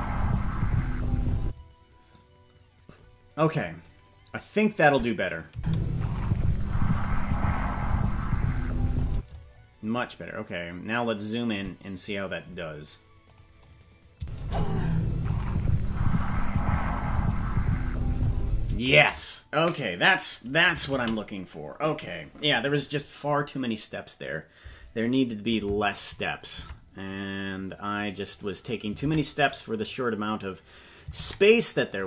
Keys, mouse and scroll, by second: 1.4 space, 4.9 click, 5.5 space, 9.1 space, 9.5-10.4 scroll up 5, 11.5 click, 11.5 scroll down 1, 13.2 click, 14.1 space, 18.7 space, 23.2 ctrl+s, 26.6 ctrl+Tab, 27.0-28.3 scroll down 4, 27.5-28.3 scroll up 1, 28.3 right click, 29.0 ctrl+Tab, 29.8-31.1 right drag, 31.1 ctrl+Tab.